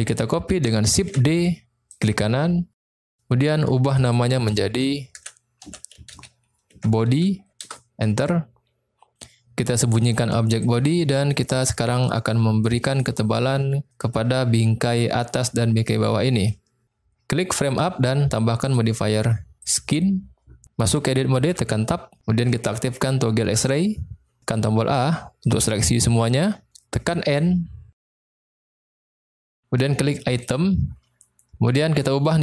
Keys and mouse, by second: 1.0 shift+d, 1.8 click, 4.1-9.0 drag, 10.6 click, 11.3 middle click, 11.9 middle click, 12.8 click, 18.6-19.7 drag, 21.6 Tab, 23.6 click, 24.9 a, 27.3 n, 30.4 click.